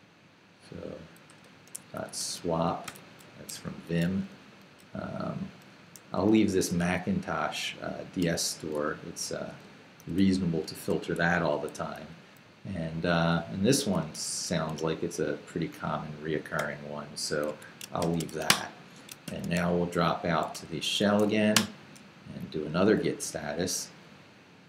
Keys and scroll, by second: 1.0-2.9 typing, 3.5 Escape, 3.9 j, 5.2 j, 5.9 h, 6.9 Return, 9.0 k, 9.6 shift+k, 10.0 shift+,, 11.2 shift+Escape, 11.4 j, 14.0 x, 15.7 i, 17.5 Escape, 18.0-21.7 typing, 18.5 Return, 19.1 shift+Return, 23.1 Down, 23.4 Up.